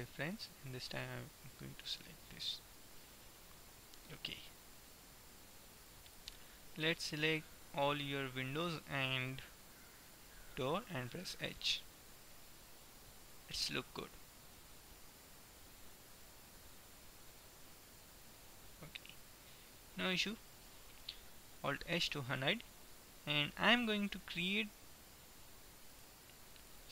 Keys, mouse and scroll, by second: 2.3 middle click, 3.0-5.0 middle drag, 5.0-6.6 drag, 6.1-10.5 right drag, 11.3 h, 11.6-13.5 middle drag, 17.6-20.1 middle drag, 22.1 alt+h, 23.6 right click, 24.5-26.1 middle drag, 26.1 right click.